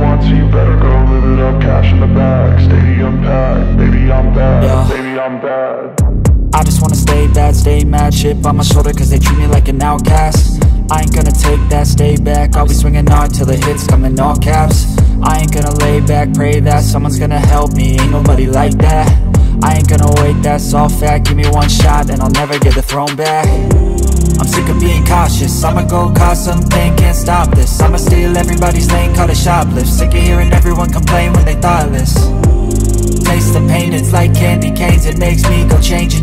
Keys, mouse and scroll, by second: 0.8 double click, 4.3 typing, 9.2-10.5 scroll down 1, 10.5-11.2 scroll up 1, 11.2-11.6 scroll down 1, 11.6 alt+middle click, 12.0-12.8 scroll up 1, 12.8 right click, 18.5 scroll down 1, 18.7 alt+middle click, 19.2 scroll up 1, 19.7 right click, 21.7 alt+middle click, 21.9 alt+click, 22.2-22.7 scroll up 4, 22.4 alt+middle click, 23.0-23.3 scroll down 1, 23.4 alt+middle click, 23.7-25.3 scroll up 1, 25.3 typing, 26.0 shift+click, 26.5-27.8 typing, 27.9 scroll down 1, 28.8 alt+middle click, 28.9 scroll up 1, 29.8 shift+click, 31.1-32.1 typing, 32.3-33.1 scroll down 1, 33.2 alt+middle click, 33.4-34.1 scroll up 1, 34.3 shift+click, 34.8-35.9 typing, 35.9-36.2 scroll down 1.